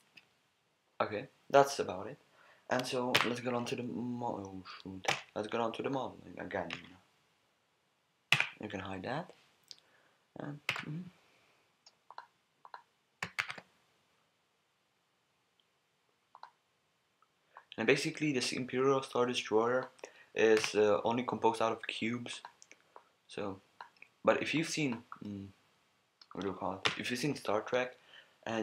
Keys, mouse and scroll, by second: 6.7 KP_1, 8.3 n, 10.7 a, 12.1-13.4 drag, 13.4 shift+a, 13.9 click, 17.5-19.8 drag, 20.6 s, 22.4-23.8 drag, 26.3 middle click, 26.8 KP_1.